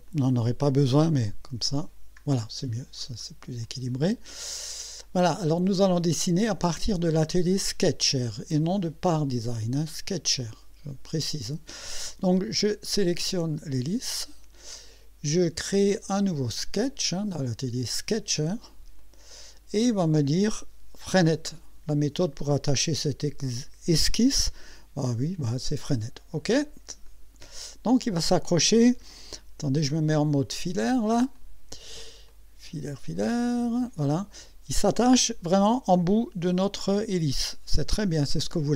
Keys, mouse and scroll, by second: 0.1 click, 1.2 click, 1.8 scroll down 1, 3.2 click, 3.7-5.2 drag, 6.1 click, 9.9 click, 13.5 click, 19.0 click, 27.1 click, 31.4 click, 32.3 click, 33.8 click.